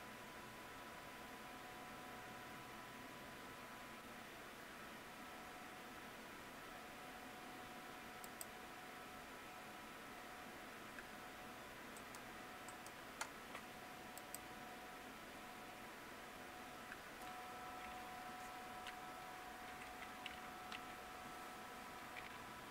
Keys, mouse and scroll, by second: 11.9 click, 12.6 click.